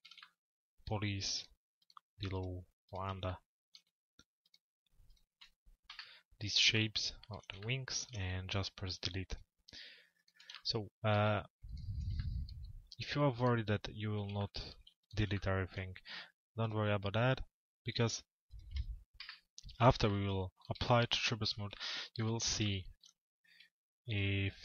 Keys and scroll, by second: 18.8 Delete.